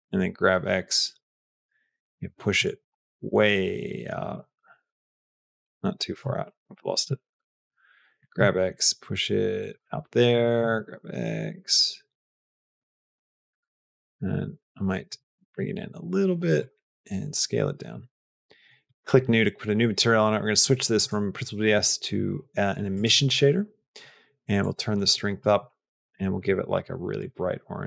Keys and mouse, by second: 4.4 g, 5.7 Escape, 6.3 ctrl+z, 6.6 ctrl+z, 6.9 ctrl+z, 8.1 g, 9.8 g, 10.6 g, 13.0 g, 15.0 g, 16.7 s, 18.9 click, 20.9-22.9 drag, 24.6 click, 26.2 click.